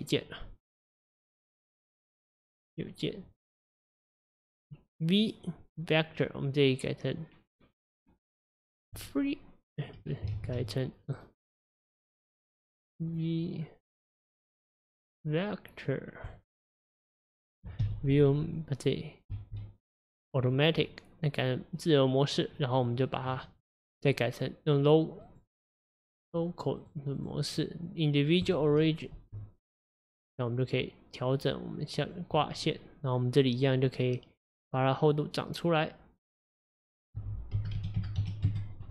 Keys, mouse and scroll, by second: 2.6 right click, 10.4 ctrl+z, 11.2 right click, 19.4 v, 20.9-22.9 middle drag, 22.9 click, 25.3-26.9 drag, 27.2-29.2 drag, 29.2 s, 32.4-35.1 middle drag, 35.1-38.9 drag.